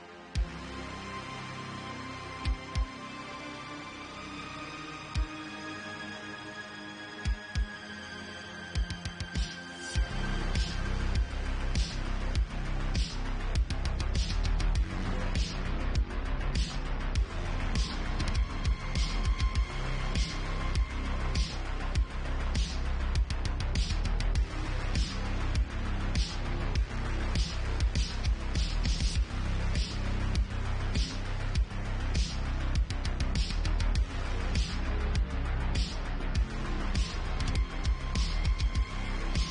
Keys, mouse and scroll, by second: 0.7 click, 1.2 g, 1.6 click, 2.2 shift+click, 2.5 j, 3.0 click, 4.2 g, 4.7 click, 5.0 Tab, 5.7 click, 6.8 ctrl+x, 7.2 Tab, 7.9 click, 8.0 g, 10.0 click, 10.2 g, 11.6 ctrl+x, 16.8 ctrl+r, 20.9 click, 22.0 ctrl+z, 22.5 ctrl+z, 22.9 Tab, 23.8 alt+click, 24.2 ctrl+x, 24.6 Tab, 25.5 Tab, 26.2 Tab, 27.2 Tab, 28.1 Tab, 28.9 Tab, 29.6 alt+click, 30.2 ctrl+x, 30.9 Tab, 32.3 click, 34.5 Tab, 35.0 Tab, 35.9 ctrl+r, 38.0 ctrl+r, 39.4 alt+click.